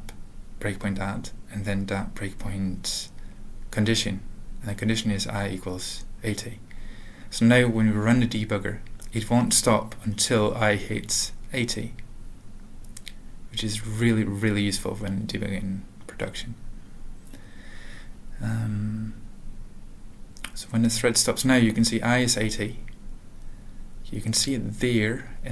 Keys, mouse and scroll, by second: 0.1 Return, 1.3 alt+x, 3.3 ctrl+n, 3.5 ctrl+n, 3.7 ctrl+n, 3.9 Return, 4.5-5.6 typing, 6.1 Return, 6.8 alt+x, 7.0-8.4 typing, 10.5-12.8 typing, 13.3 ctrl+n, 13.6 Return, 15.8 click.